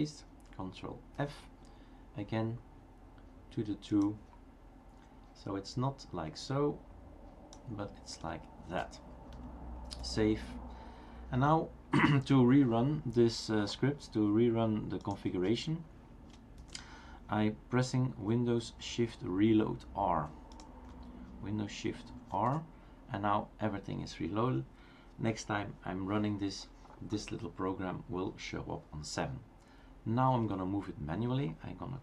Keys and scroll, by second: 1.3 super+f, 22.4 shift+super+r.